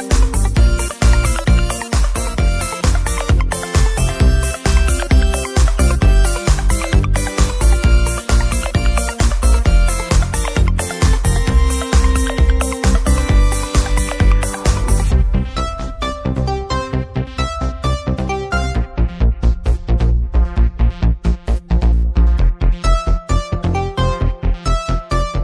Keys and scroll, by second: 4.7 Return, 6.3-9.8 typing.